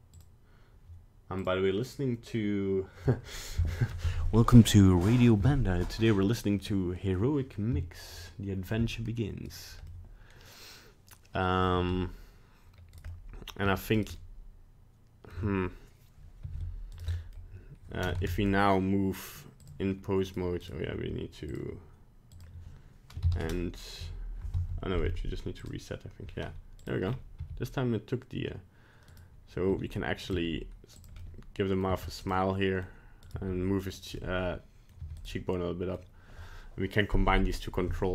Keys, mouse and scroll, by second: 6.6 middle click, 9.5 right click, 9.9 middle click, 11.8 g, 13.1 middle click, 13.1 middle click, 13.6 g, 14.2 middle click, 16.4 r, 17.1 middle click, 18.2 ctrl+Tab, 20.3 right click, 20.6 right click, 21.5 click, 22.3 click, 25.6 click, 26.8 right click, 27.1-27.4 scroll down 3, 27.4 g, 29.7 r, 30.3 g, 31.2 middle click, 31.9 g, 32.4 middle click, 33.3 right click, 33.3 g, 34.2 middle click, 35.0 g, 35.3 middle click.